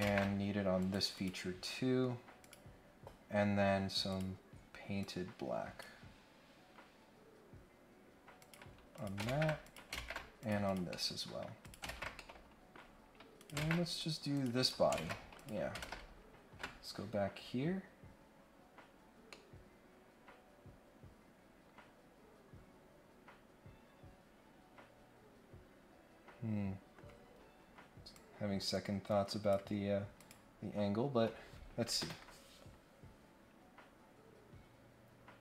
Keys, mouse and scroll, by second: 0.8 click, 1.1 click, 2.4 click, 3.3 scroll up 1, 4.1 click, 5.0 click, 8.4 click, 8.9 click, 9.6 click, 10.4 click, 10.6 click, 10.9 scroll up 1, 11.0 middle click, 11.6 click, 12.1 middle click, 13.3 click, 14.3 click, 14.6 click, 15.3 click, 15.8 ctrl+Tab, 19.2-26.9 middle drag, 28.1-29.5 drag, 30.2 click.